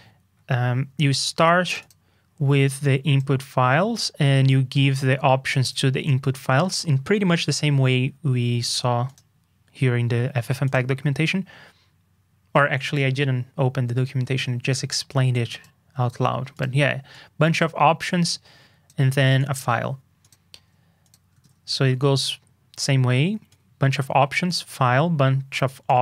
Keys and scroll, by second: 12.9 super+Tab, 21.4 super+Tab.